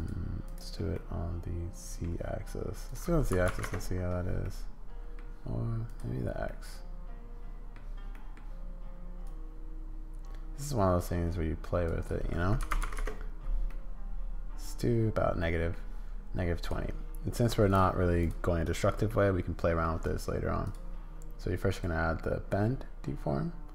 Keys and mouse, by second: 0.4 click, 0.9-2.0 middle drag, 2.8-4.1 drag, 4.4 middle click, 5.8 click, 6.5-7.7 middle drag, 8.1 middle click, 9.2-11.9 drag, 12.1-13.4 drag, 13.7-15.7 middle drag, 18.2 click, 18.7 click, 19.1 middle click, 21.7 click.